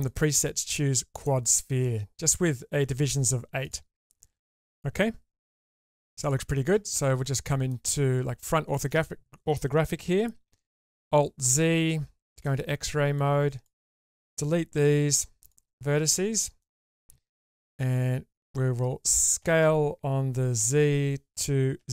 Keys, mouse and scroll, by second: 0.1-1.2 drag, 3.6 click, 4.0 click, 5.4 Tab, 6.0-7.7 middle drag, 8.4 shift+middle click, 10.4 alt+z, 13.2 click, 14.6 Delete, 16.6 shift+middle click, 17.8 a, 19.4 s.